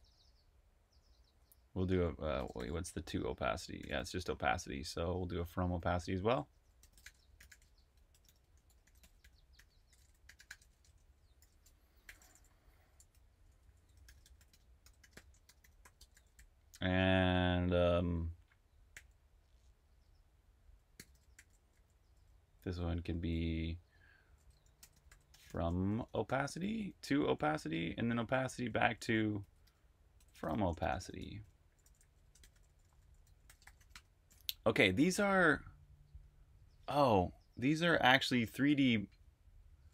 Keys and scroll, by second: 0.0-6.8 typing, 8.7-16.6 typing, 17.9-18.9 typing, 20.4-35.1 typing, 36.7 typing, 38.2-39.9 typing.